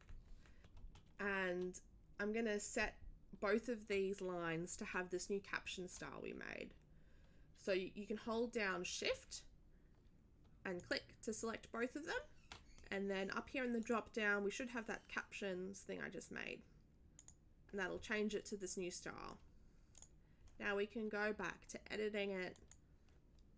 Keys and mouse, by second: 10.8 shift+click, 13.8 click, 17.1 click, 19.9 click, 22.5 click.